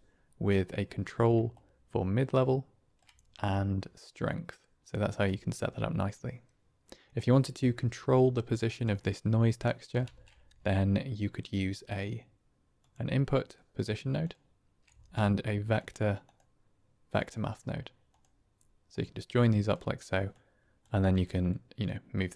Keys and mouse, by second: 1.5-2.9 shift+drag, 3.5-5.1 shift+drag, 7.1-8.5 drag, 8.9 middle click, 10.0 shift+a, 14.8 shift+a, 18.8-19.6 drag, 20.2-20.7 drag, 21.1-22.3 shift+drag.